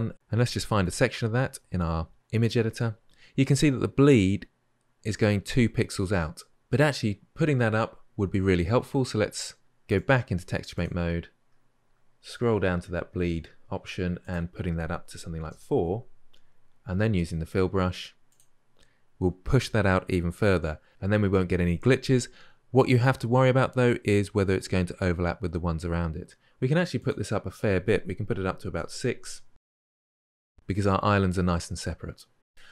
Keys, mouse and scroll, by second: 10.6-32.7 drag.